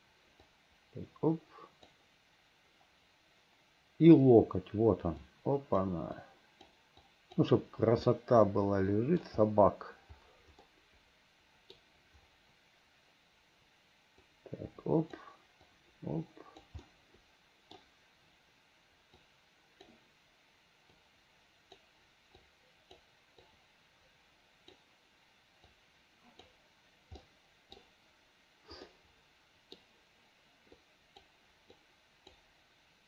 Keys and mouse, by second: 0.6-1.9 right drag, 5.3 right click, 6.3 right click, 7.1 right click, 8.2-9.3 middle drag, 10.7-11.9 middle drag, 14.4 click, 15.8 click, 17.0 middle click, 19.4 click, 21.1 click, 22.5 click, 23.5-24.9 drag, 25.8 right click, 27.3 middle click, 29.0 middle click, 30.9 right click, 31.9 right click.